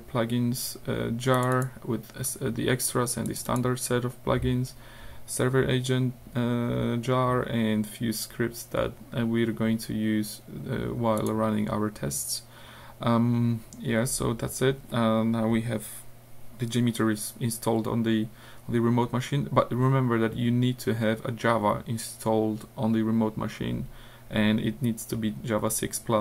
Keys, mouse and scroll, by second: 1.4 click, 3.3 click, 8.7-9.3 scroll up 2, 9.8 scroll down 2, 11.2 click.